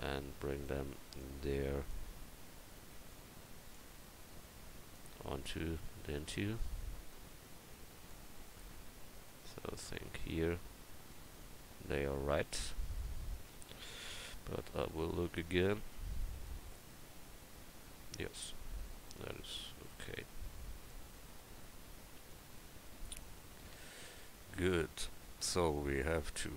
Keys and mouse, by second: 5.7-6.8 middle drag, 13.7 KP_1.